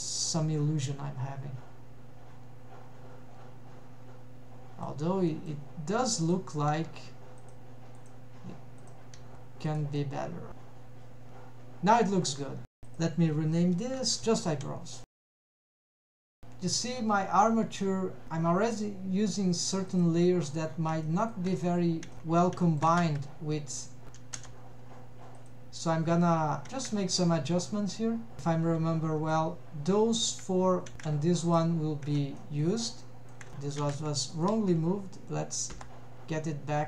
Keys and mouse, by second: 0.7-5.0 middle drag, 5.4 middle drag, 6.3 click, 6.8 g, 8.0 click, 8.9 click, 9.3 g, 10.0 middle click, 11.1-12.8 middle drag, 12.9-14.2 drag, 15.5 click, 20.0 click, 21.1-21.4 shift+middle drag, 22.1 shift+middle click, 22.6 shift+middle click, 23.1 a, 24.4 m, 26.7 shift+middle click, 29.4 shift+click, 31.5 shift+click, 32.4 middle drag, 33.1 shift+middle drag, 33.8 alt+a, 34.3 click, 35.8 m.